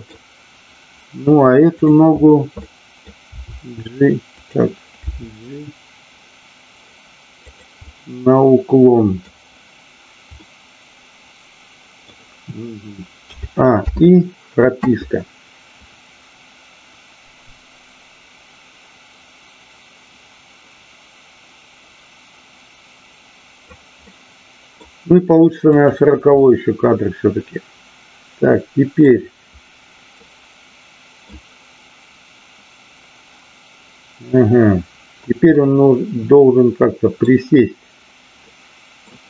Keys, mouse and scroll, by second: 1.7 click, 2.7 middle click, 3.2 r, 4.3 click, 4.9 g, 7.4 click, 7.9-9.3 middle drag, 10.4-12.1 middle drag, 15.8-23.6 drag, 24.0 middle click, 25.7 click, 26.4-29.0 middle drag, 30.1-31.2 middle drag, 35.5-37.2 middle drag, 38.4-39.1 middle drag.